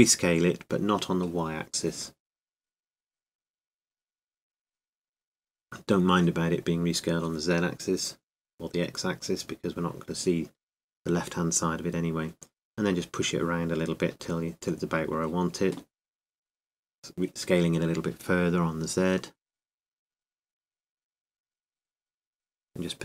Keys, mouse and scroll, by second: 1.6 s, 7.9 shift+i, 22.6 shift+s.